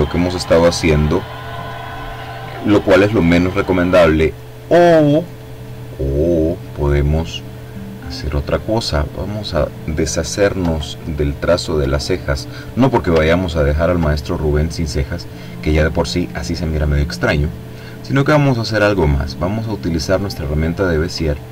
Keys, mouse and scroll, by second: 8.9 click, 10.4 Delete, 11.4 click, 11.6 Delete, 13.3-13.8 ctrl+scroll down 2, 15.4-15.9 scroll down 2, 16.3-16.8 scroll up 2, 19.9 click.